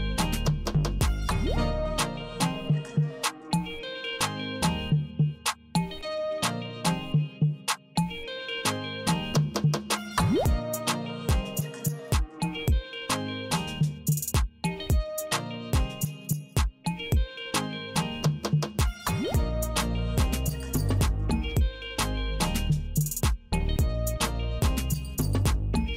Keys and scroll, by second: 3.5 Return, 7.5 space, 11.5 super+r, 16.7 Return, 20.7 space, 23.0 super+r.